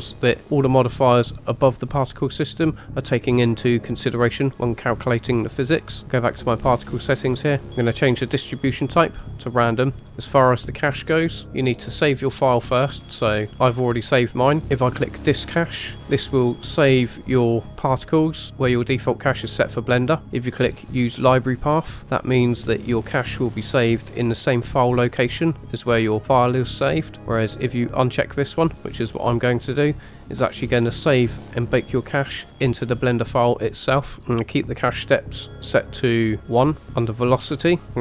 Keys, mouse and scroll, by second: 6.3 click, 7.2-8.3 scroll down 3, 8.3-9.2 drag, 10.8 click, 13.1 click, 14.6-16.7 scroll down 1, 28.0 click, 36.9 click, 37.4-38.0 scroll down 3.